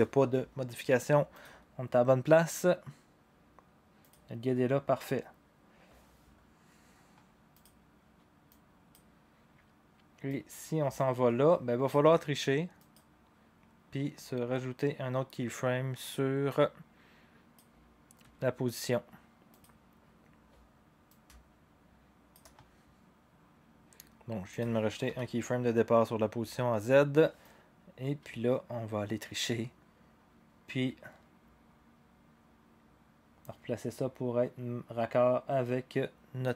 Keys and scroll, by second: 25.1 u.